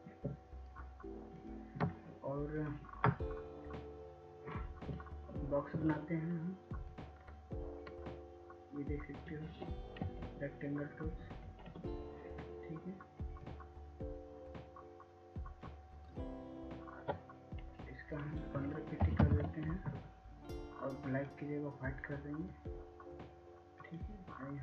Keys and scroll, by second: 11.2 ctrl+s, 11.7 ctrl+s, 12.0 ctrl+s, 12.4 ctrl+s, 20.2-20.7 typing.